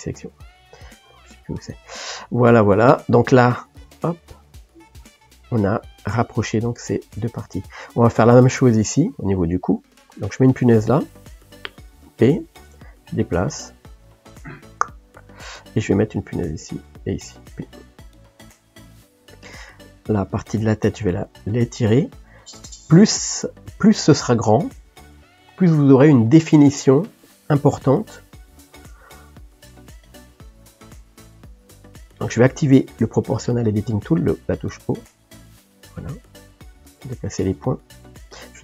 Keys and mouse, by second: 4.0 g, 8.2 click, 9.2 click, 11.0 click, 12.3 p, 13.2 g, 16.6 click, 18.1 p, 19.6 click, 21.0 g, 28.1 click, 28.6 click, 29.6 shift+click, 30.2 g, 31.1 click, 31.9 click, 32.9 o, 33.5 g.